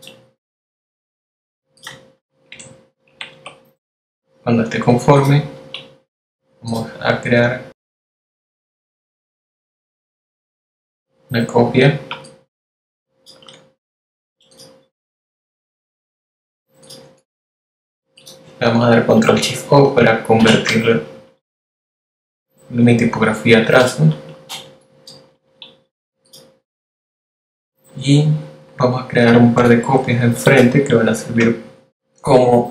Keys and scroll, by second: 4.2 shift+Down, 4.8 shift+Up, 19.4 shift+super+o, 23.5 space, 24.6 v.